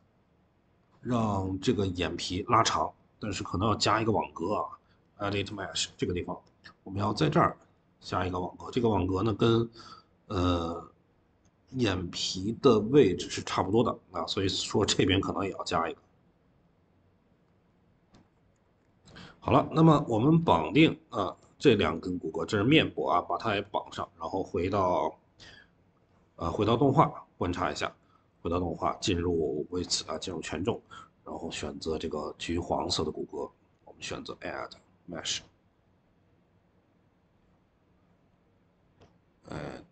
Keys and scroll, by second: 18.5 ctrl+s, 23.3 Escape, 26.2-26.7 typing.